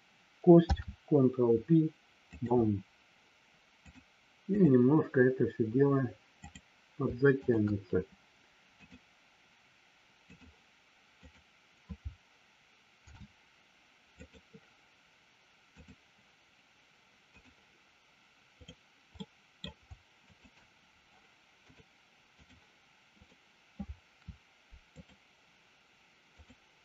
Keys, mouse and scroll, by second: 0.6 ctrl+p, 3.8 click, 6.4 click, 7.3 shift+click, 8.8-10.4 drag, 11.2 click, 13.0 ctrl+p, 15.8-17.4 drag, 18.4 click, 19.2 middle click, 21.7 click, 23.2 click, 26.3 click.